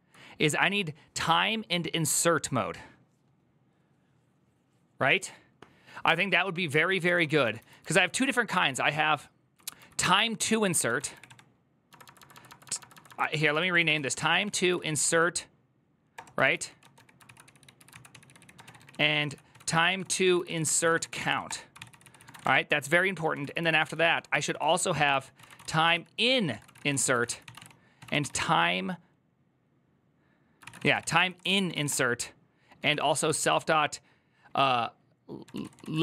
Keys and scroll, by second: 6.5-28.6 typing, 8.3 ctrl+u, 8.5 ctrl+u, 15.9 Return, 21.7 ctrl+c, 30.3-33.7 typing, 31.2 ctrl+c, 35.0-36.0 typing.